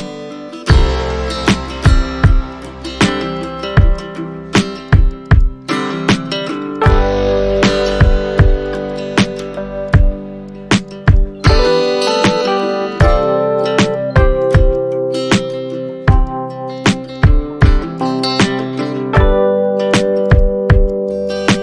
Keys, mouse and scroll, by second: 0.8 super+middle click, 1.3 shift+click, 3.1 shift+click, 5.2 shift+click, 10.4 Tab, 12.3 shift+click, 12.7 shift+click, 13.2 shift+click, 13.9 shift+click, 14.4 shift+click, 14.6 scroll down 1, 14.7 shift+click, 15.7 scroll up 1, 17.5-17.9 scroll down 1, 17.9 alt+click, 19.4-19.9 scroll up 2, 19.6 alt+middle click, 19.9 alt+click, 20.5 ctrl+z.